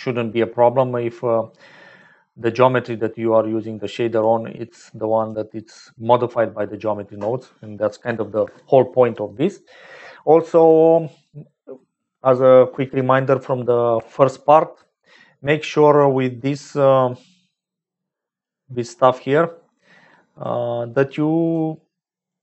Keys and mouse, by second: 1.9-3.1 drag, 3.7 click, 4.7 click, 17.5 click, 18.9 click, 20.2-22.3 drag.